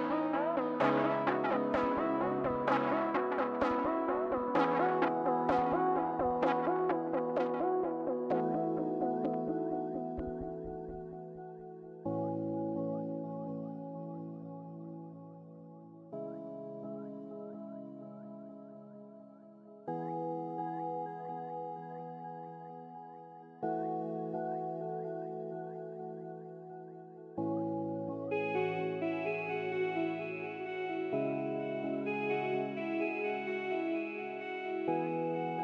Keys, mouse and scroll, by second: 1.4-2.2 scroll down 1, 2.2 scroll down 1, 2.3 middle click, 2.6-4.4 scroll up 1.